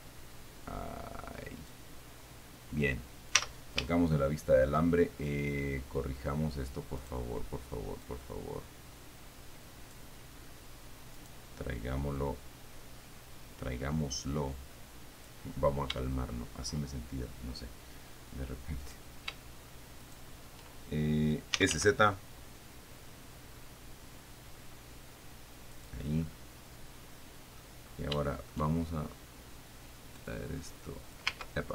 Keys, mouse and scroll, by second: 2.4-3.7 scroll down 2, 3.7 z, 4.2 shift+middle click, 5.1 shift+scroll up 2, 7.3 right click, 8.5-10.4 drag, 11.4 right click, 12.4 middle click, 12.5-15.7 drag, 15.8-16.2 scroll down 1, 16.5 shift+middle click, 19.1 middle click, 19.2 right click, 19.5 g, 20.3 shift+right click, 21.6-22.5 typing, 26.0 click, 26.5-28.0 middle drag, 28.5 shift+middle click, 30.5-31.6 drag, 31.5 ctrl+z.